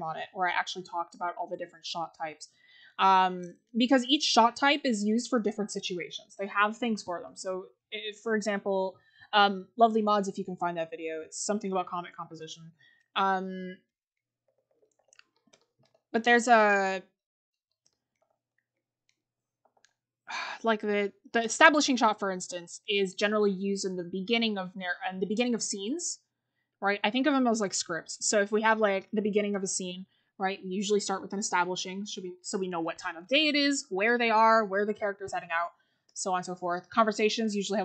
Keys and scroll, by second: 8.2-8.9 scroll up 1, 14.5-15.3 scroll down 1, 15.9-16.4 scroll up 1, 17.7 scroll.